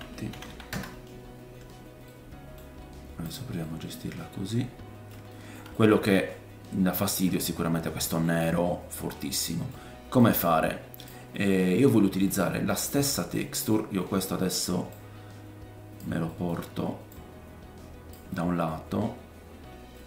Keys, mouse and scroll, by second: 2.0 middle click, 2.8-3.2 scroll down 2, 3.3-7.8 drag, 3.6 middle click, 4.2 middle click, 5.3 shift+middle click, 7.4-7.8 scroll up 4, 7.8-9.6 middle drag, 8.6-9.4 scroll down 5, 9.6-12.6 drag, 10.2-13.3 middle drag, 10.2-12.6 right drag, 14.1 middle click, 14.4-14.9 scroll down 1, 14.9 click, 16.3 middle click, 17.1 click, 18.3 middle click, 19.3-20.0 middle drag, 19.7 scroll down 1.